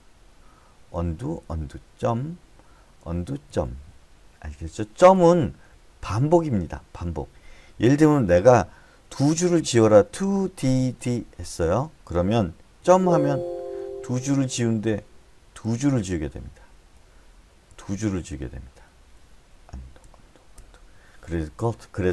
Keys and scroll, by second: 1.3 u, 1.8 u, 2.4 ., 3.4 u, 3.9 ., 9.5 2, 11.0 d, 11.4 d, 13.2 ., 14.7 k, 16.0 ., 17.2-18.6 typing, 19.9 u, 20.4 u, 21.0 u.